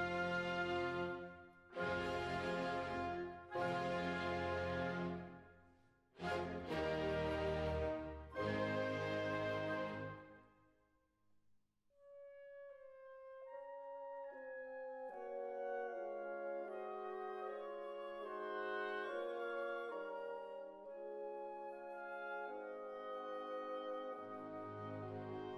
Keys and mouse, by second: 4.3 ctrl+r, 7.5 ctrl+r, 8.4 right click, 11.8 ctrl+r, 13.5-15.8 middle drag, 15.8 k, 18.1 middle click, 19.0 click, 19.3 right click, 19.9 click, 20.2 e, 20.7-21.7 drag, 21.9 click, 22.9 click, 23.8 ctrl+r, 24.2 click, 25.3 middle click.